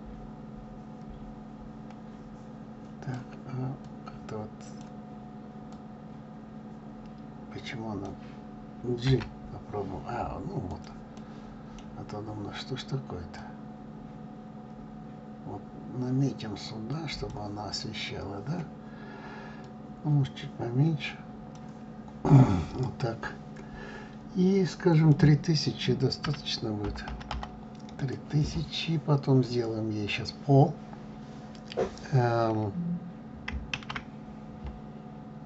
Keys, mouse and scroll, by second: 5.8 click, 9.2 g, 11.3-12.0 middle drag, 12.0-12.3 scroll down 4, 13.7 click, 19.8-22.5 drag, 22.5-23.4 scroll up 3, 28.1 0, 29.9 scroll up 2.